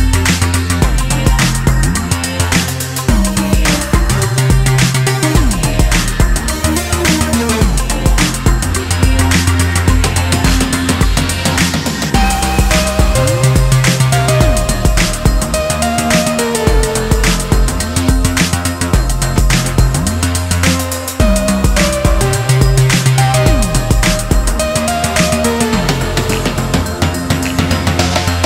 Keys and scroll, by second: 19.3 ctrl+z, 28.0 ctrl+g.